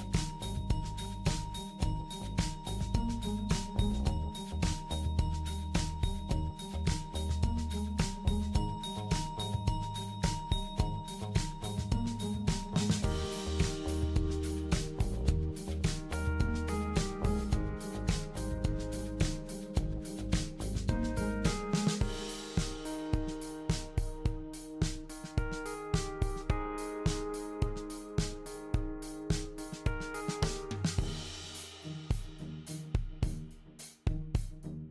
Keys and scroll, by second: 26.5 typing, 33.1-33.6 typing.